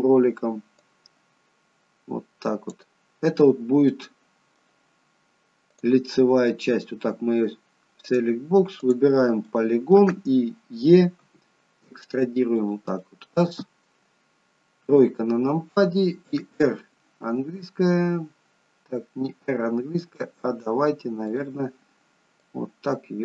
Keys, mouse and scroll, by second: 1.0 click, 4.0 middle click, 5.9 click, 6.2 middle click, 8.2 click, 8.9 click, 9.6 middle click, 11.4 e, 13.1 middle click, 14.9 KP_3, 17.4 r, 21.4 click, 22.6 click.